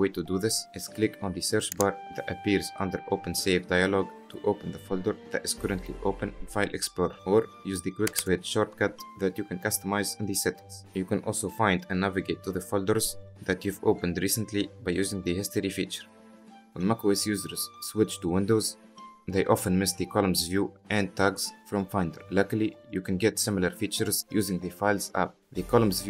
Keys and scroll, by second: 8.1 ctrl+q.